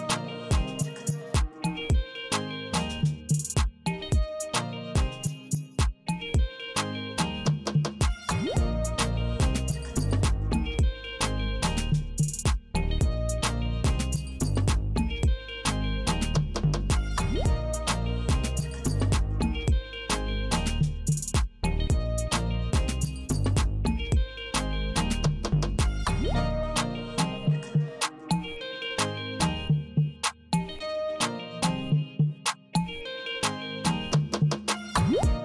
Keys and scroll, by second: 3.4 ctrl+w, 26.0 ctrl+w.